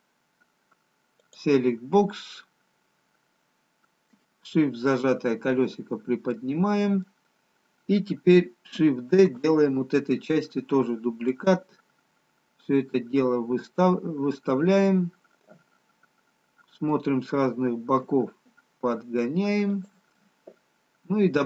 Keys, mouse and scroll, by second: 2.8 click, 2.8-4.2 scroll down 2, 4.4 shift+middle click, 7.1 middle click, 9.6 shift+d, 14.9 middle click, 20.4 middle click, 20.4 g.